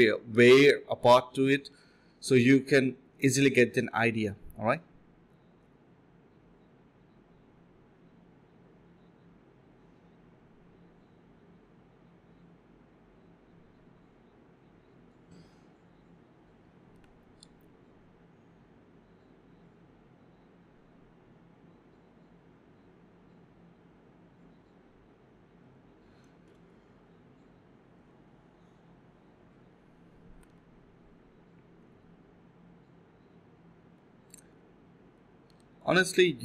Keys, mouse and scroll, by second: 0.1 typing, 1.6 shift+click, 1.7 shift+double click, 1.8 shift+click, 2.1 alt+click, 2.4 alt+click, 2.7 typing, 3.6 double click, 5.4 alt+click, 5.5 alt+double click, 5.5 alt+click, 5.8 double click, 6.7 alt+click, 7.5 alt+click, 7.7 alt+click, 7.9 alt+click, 8.3 alt+click, 8.8 f, 9.3 alt+click, 9.4 alt+click, 9.6 alt+click, 10.0 alt+click, 10.4 typing, 10.7 ctrl+b, 13.0 typing, 14.0 alt+click, 15.2 f, 15.7 alt+click, 16.4 2, 17.7 alt+click, 18.0-19.5 typing, 18.9 alt+click, 19.1 alt+click, 24.1 typing, 26.3 shift+click, 26.4 shift+double click, 26.5 shift+click, 27.4 ctrl+z, 29.5 1, 29.8 shift+click, 30.7 alt+click, 31.4 1, 31.4 1, 31.7 shift+click, 32.4 alt+click, 33.2 shift+click, 34.6 ctrl+b, 34.9 double click, 36.0 alt+click.